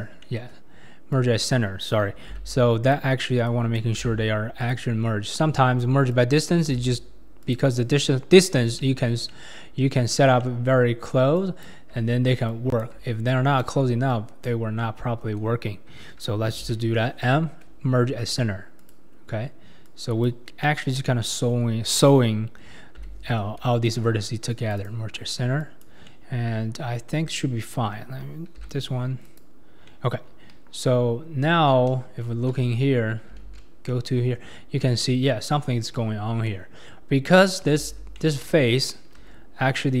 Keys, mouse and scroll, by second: 0.2 middle click, 1.1 click, 2.3 m, 3.5 click, 4.0 m, 5.4 middle click, 6.1 click, 6.8 m, 8.0-9.1 middle drag, 9.1 scroll down 1, 9.3-11.4 middle drag, 11.4 click, 12.5 click, 13.3 shift+click, 14.1 shift+click, 14.8-16.6 shift+middle drag, 16.6 m, 19.8 click, 20.6-23.0 middle drag, 23.0 m, 24.8 click, 25.6 click, 26.1-27.6 middle drag, 27.6-28.5 scroll up 1, 28.6 m, 29.9 middle click, 30.2 scroll, 32.7 Tab, 33.4 alt+z, 33.9-37.7 middle drag, 37.7 alt+z, 38.2 middle click, 39.1 Tab, 39.8-40.0 middle drag.